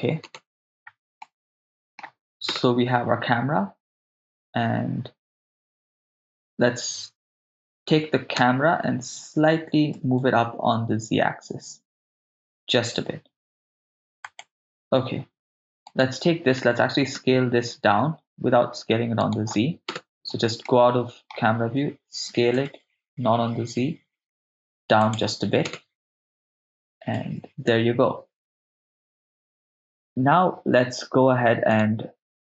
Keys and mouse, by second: 0.3 KP_0, 1.3-2.0 middle drag, 2.5 KP_0, 8.4 g, 10.0 z, 14.3 ctrl+click, 16.0-17.2 drag, 16.0 right click, 17.2 s, 17.8 shift+z, 19.2 right click, 19.9 KP_0, 20.7 middle click, 22.3 s, 22.6 shift+z, 25.1 click, 25.7 KP_0, 27.2 shift+space, 27.7 shift+space, 31.7 click, 31.7 right click.